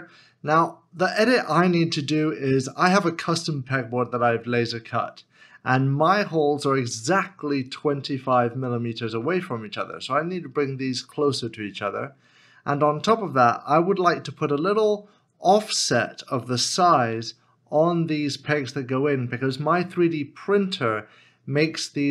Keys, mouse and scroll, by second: 2.0 shift+middle click.